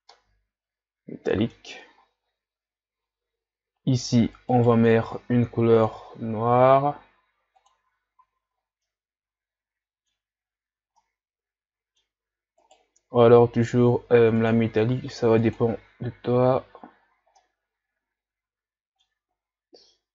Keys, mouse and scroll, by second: 0.1-3.4 middle drag, 3.4-4.6 scroll up 2, 4.6 right click, 7.9 click, 8.3 a, 8.5-8.9 scroll down 3, 8.9-10.4 middle drag, 10.4-10.9 scroll up 4, 10.9-12.8 middle drag, 12.8 right click, 15.8 click, 16.2 a, 16.7-17.2 scroll down 2, 17.4-19.3 middle drag, 19.3-20.1 scroll down 6.